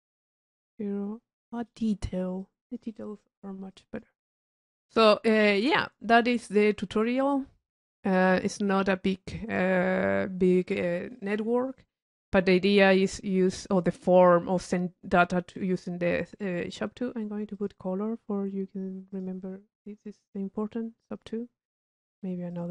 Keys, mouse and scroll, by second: 2.6-3.5 drag, 3.9 click, 5.1-6.2 drag, 6.9 click, 7.9 click, 12.5-13.9 middle drag, 13.9 click, 16.0-17.9 middle drag, 17.7 click, 19.3 click, 20.4 click, 21.1-22.7 middle drag.